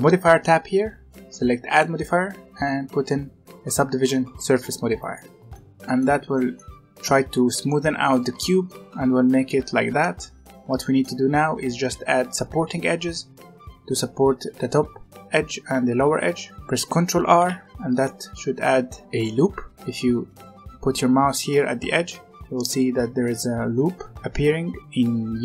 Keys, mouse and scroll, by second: 1.6-4.6 drag, 5.3 scroll down 1, 5.4-6.0 middle drag, 6.0 z, 6.3-9.3 middle drag, 9.9 Tab, 10.1-13.2 middle drag, 17.3 ctrl+r.